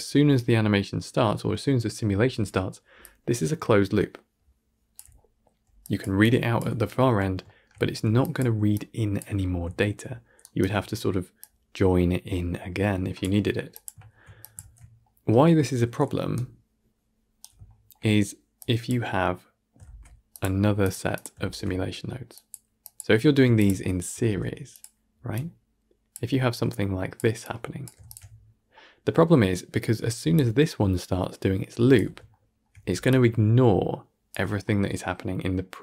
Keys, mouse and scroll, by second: 2.9-6.5 drag, 6.5 d, 8.1-10.5 drag, 10.5 shift+right click, 13.1 click, 14.3 click, 14.5 ctrl+x, 16.2-18.5 right drag, 18.5-18.8 drag, 20.8 shift+a, 22.4 shift+a, 23.5-26.0 shift+drag, 26.4-27.0 drag, 27.3-28.0 drag, 30.2-35.8 drag.